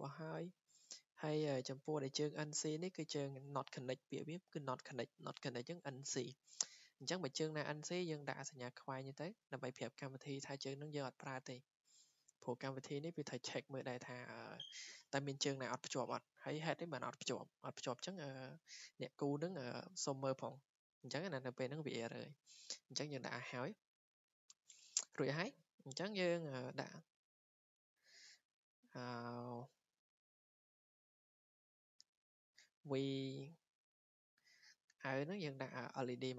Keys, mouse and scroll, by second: 1.1 click, 2.0-2.4 scroll, 2.8 scroll up 6, 3.2 Escape, 5.9 scroll, 7.6 click, 8.7 click, 9.6 click, 10.1 Escape, 11.0-11.6 scroll down 7, 11.8-12.2 scroll up 2, 12.4 scroll, 16.7-17.4 scroll up 3, 24.2 Escape, 25.5-25.9 scroll, 27.3 click, 29.5 click, 29.9 Escape, 30.3-30.8 scroll, 31.5 w, 32.1 click, 32.6 click, 32.9 Escape, 34.2-34.8 scroll, 35.9 click.